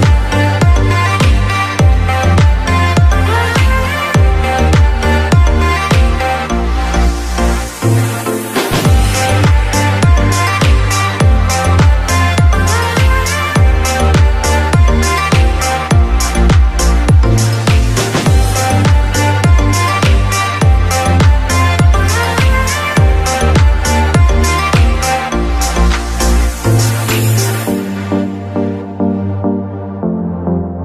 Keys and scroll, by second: 0.1 shift+space, 2.1 Delete, 8.1 shift+space, 12.1 shift+space, 24.9 shift+space, 28.1 shift+space.